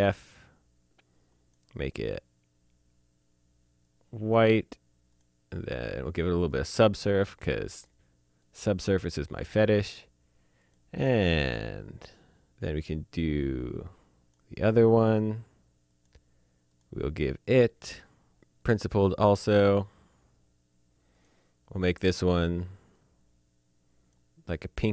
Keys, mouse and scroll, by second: 1.3 click, 3.8 click, 14.3 click, 15.9 click, 18.6 click, 21.1 click, 23.1-24.1 drag.